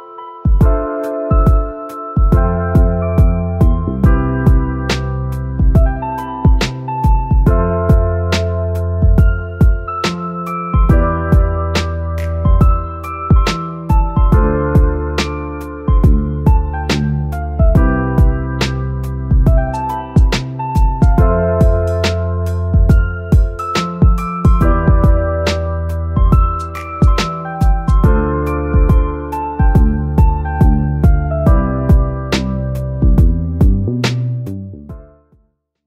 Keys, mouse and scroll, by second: 0.0-18.7 drag, 18.6-20.0 typing, 20.6 click, 21.1 F5, 22.8-35.5 drag.